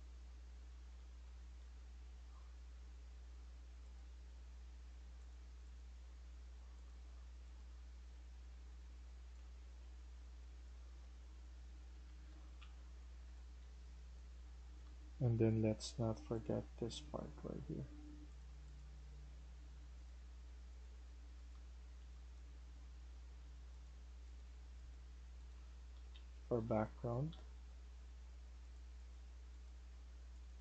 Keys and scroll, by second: 0.0-2.0 typing, 7.4-10.0 typing, 12.0 Escape, 12.2 Escape, 12.2-15.2 typing, 21.4-22.5 typing, 25.2-27.7 typing, 29.4-30.6 typing.